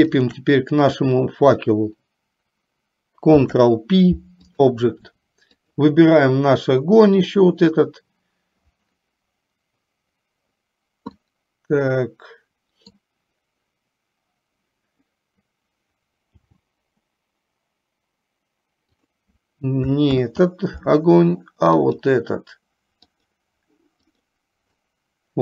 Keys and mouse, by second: 3.3 ctrl+p, 11.4-13.2 middle drag, 17.3 g, 20.3 ctrl+z, 23.2 click, 24.3 click.